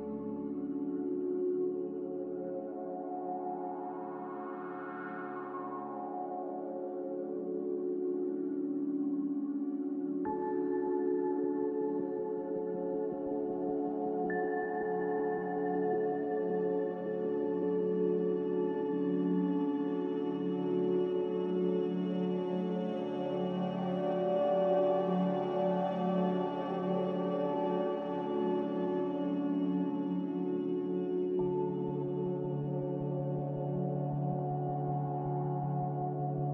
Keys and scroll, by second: 0.0-3.4 typing, 5.3 n, 11.0 a, 16.8-19.4 typing, 21.4-23.8 typing.